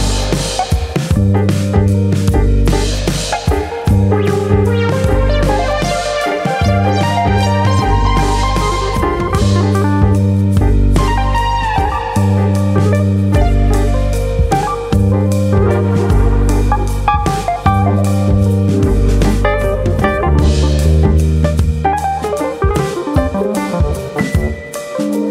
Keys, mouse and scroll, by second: 0.1 click, 1.1 f, 1.5 f, 2.5 middle click, 3.2 middle click, 4.3 ctrl+r, 5.2 right click, 5.5 middle click, 6.6 ctrl+z, 7.6 f, 9.2 ctrl+r, 10.1 right click, 10.4 middle click, 11.3 1, 11.6 click, 12.1 shift+click, 19.6 m, 21.6 click, 21.9 shift+click, 23.0 m, 24.2 middle click.